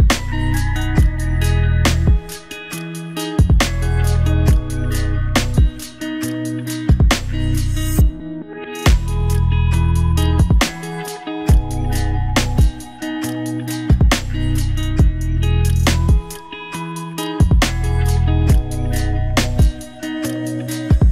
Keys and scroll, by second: 14.5 ctrl+d.